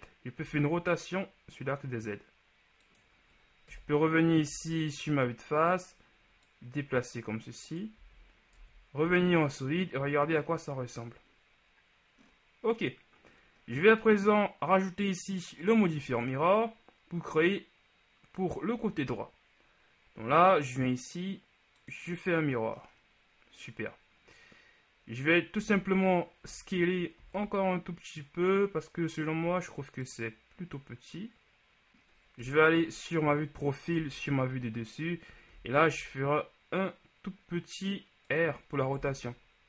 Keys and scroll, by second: 0.5 r, 4.6 z, 8.1 z, 8.7 Tab, 9.1 a, 25.7 z, 27.5 shift+s, 32.6 KP_3, 34.0 KP_7, 35.6 r, 36.0 z, 39.2 KP_1.